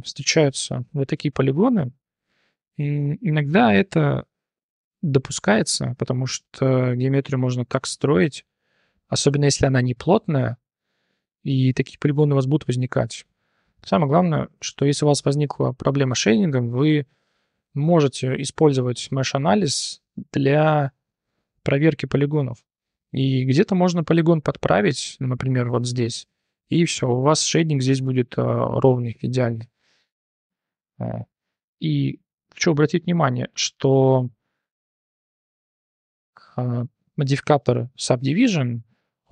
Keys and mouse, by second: 0.2 click, 0.9 3, 1.0 click, 1.6 click, 2.5 click, 3.4 click, 4.6 3, 4.8 click, 5.6 3, 5.8 click, 6.2 click, 6.4 click, 6.9 3, 7.1 click, 8.2 click, 9.0 1, 9.5 click, 11.8 click, 12.8 click, 13.9 click, 14.2 click, 15.6 click, 16.3 click, 17.4 click, 18.7-21.2 drag, 21.2 middle click, 22.7 middle click, 23.7 click, 24.5 click, 25.8 g, 27.1 click, 30.0 shift+click, 30.8 g, 31.9 shift+click, 32.2 Tab, 32.6 click, 33.1 /, 33.4 click, 34.0 click, 34.6 Tab, 35.9 click, 37.2 Tab, 37.7 click, 39.1 ctrl+1.